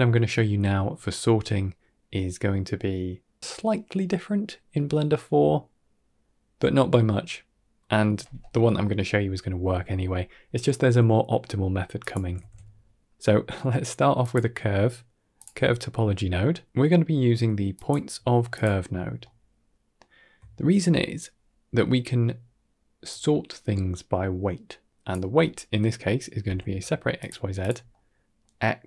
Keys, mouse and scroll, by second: 3.4-4.1 middle drag, 7.7 middle click, 9.7 middle click, 10.0 middle click, 10.6 middle drag, 11.3 middle click, 11.9 click, 12.2 shift+a, 19.1-20.1 ctrl+middle drag, 20.4 middle click, 22.9-27.5 drag, 27.8-28.3 middle drag.